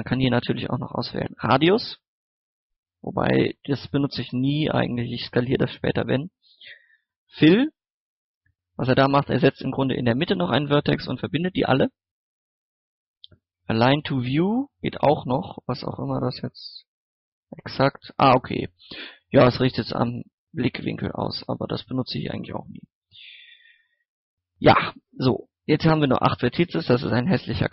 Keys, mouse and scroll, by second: 5.9 scroll down 1, 6.4 scroll up 1, 7.4 click, 14.5 middle click, 16.7 click, 17.9-20.5 middle drag, 20.5 click, 20.9 scroll down 1, 21.2 scroll up 1, 21.6-22.0 scroll down 1, 22.7 scroll up 1, 25.1 click.